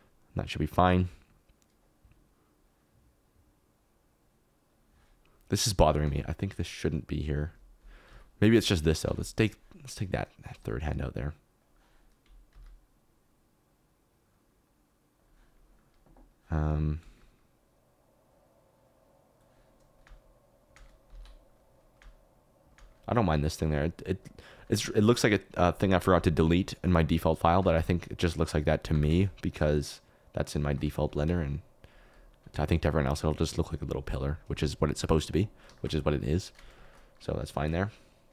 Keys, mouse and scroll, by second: 0.3 middle click, 2.3-4.8 drag, 6.0 x, 7.4 typing, 8.3 ctrl+z, 9.0 typing, 10.8 click, 11.6 click, 12.5 s, 16.6 space, 17.2 space, 20.0 space, 21.0 ctrl+space, 21.3 ctrl+s, 22.0 space, 22.7 space, 27.5 g, 27.7 x, 28.9 g, 29.1 shift+z, 31.1 g, 31.2 x, 35.7 shift+middle click, 36.8 shift+middle click, 37.5 shift+middle click.